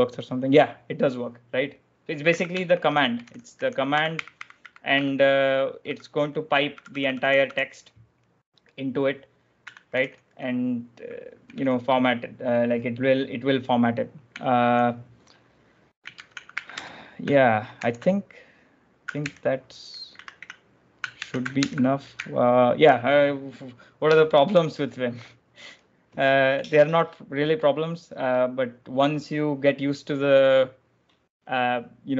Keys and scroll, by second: 0.0-0.2 typing, 1.3-7.2 typing, 9.4-10.2 typing, 11.2-12.7 typing, 15.8-20.1 typing, 19.1 ctrl+j, 21.0 ctrl+j, 21.4 1.